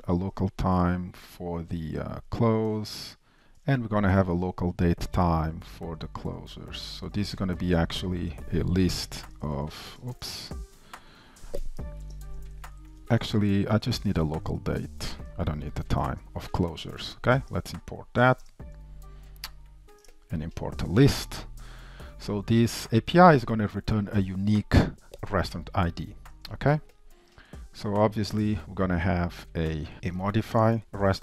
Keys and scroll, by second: 1.6 Tab, 5.5 Return, 10.2 super+z, 14.6 ctrl+shift+Right, 15.0 Delete, 17.5 alt+Return, 22.8 ctrl+shift+Right, 27.4 shift+Return, 29.9 super+v, 30.3 ctrl+shift+Left.